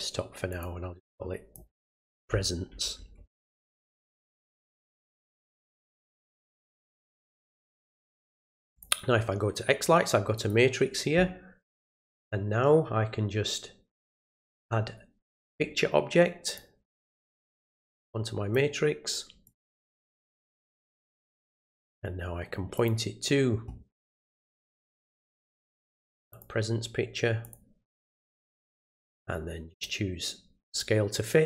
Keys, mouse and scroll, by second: 0.5 click, 0.9 click, 7.0 click, 8.7 click, 10.3 click, 15.2-16.5 drag, 17.9 click, 19.4 click, 21.0 click, 22.7 click, 24.5 click, 26.3 click, 27.4 click, 29.7 click, 30.7 click.